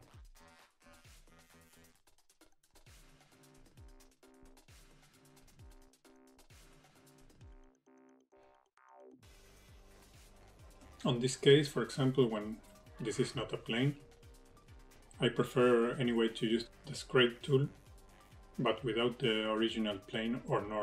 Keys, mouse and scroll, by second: 0.9-1.5 scroll down 6, 1.0 middle click, 1.3 middle click, 1.7-2.1 scroll up 5, 1.8 shift+middle click, 2.1 middle click, 2.3 shift+middle click, 2.4 middle click, 2.6 middle click, 3.1 scroll down 5, 3.2 shift+middle click, 3.9-4.3 scroll up 5, 4.3 shift+middle click, 5.0 KP_1, 5.3 KP_3, 5.6-5.9 scroll down 4, 5.9 shift+middle click, 6.4 middle click, 7.4 click, 7.5 click, 8.4 click, 9.8 click, 10.2-10.6 scroll up 5, 10.3 shift+middle click, 10.6 middle click, 11.6 f, 12.1 click, 13.8 click, 16.1 click, 16.7 click, 17.8 ctrl+z, 18.0 click, 18.7 click, 18.9 click, 19.1 click, 19.3 click, 19.6 middle click, 20.3 shift+middle click, 20.5 middle click.